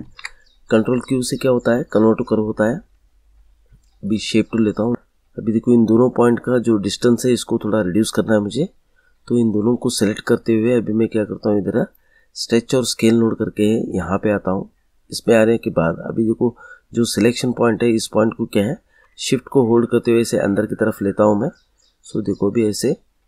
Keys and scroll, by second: 0.0 ctrl+q.